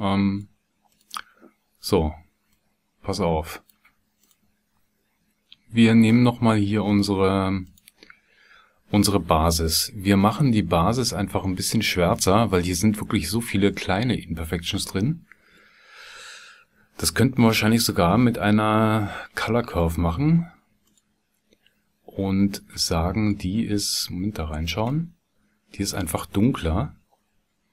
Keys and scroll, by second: 17.1 shift+a.